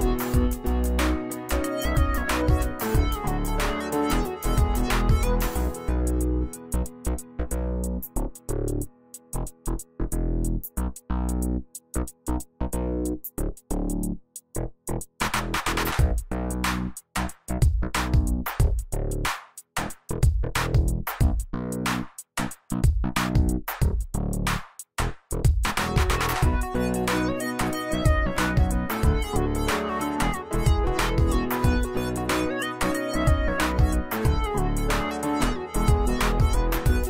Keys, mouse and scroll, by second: 0.0-1.0 drag, 3.1 right click, 4.1-8.3 drag, 8.3 ctrl+d, 10.0 click, 10.7 right click, 11.7-13.8 drag, 14.2-14.7 alt+shift+drag, 17.0 z, 17.2 alt+click, 17.5 space, 20.4-20.9 drag, 22.7 scroll down 1, 23.4 click, 24.3-25.3 alt+drag, 27.8-28.7 alt+click, 34.5 click, 35.0 z, 35.5 click, 36.9 c.